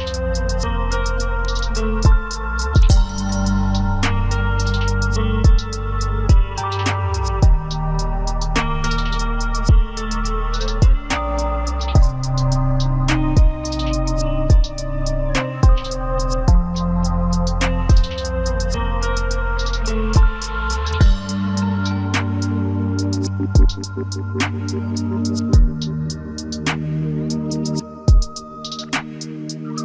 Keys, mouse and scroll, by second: 0.0-2.5 scroll up 1, 3.2 double click, 5.6 scroll down 1, 6.5 alt+click, 7.3 right click, 9.5 scroll down 1, 12.3-13.2 scroll up 1, 14.7 ctrl+space, 18.1 typing, 19.4 double click, 23.9 right click, 25.2 double click.